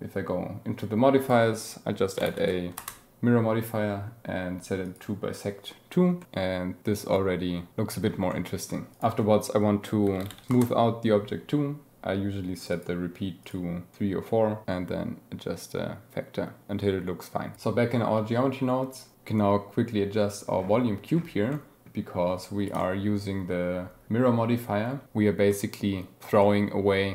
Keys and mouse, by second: 1.2-2.9 drag, 6.2-8.9 drag, 12.6 click, 13.4 click, 14.6-17.5 drag, 21.5 click, 22.8-23.1 drag, 25.5 drag, 27.0 click.